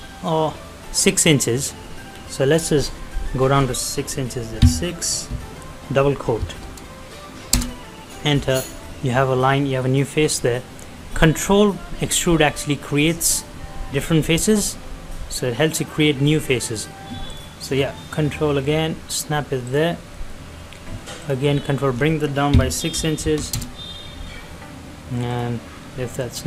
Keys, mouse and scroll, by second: 6.4 typing, 7.4 Return, 17.0 Return, 17.2 ctrl+click, 19.6 ctrl+click, 20.0 middle click, 21.2 click, 23.2 shift+', 23.5 Return, 25.3 click.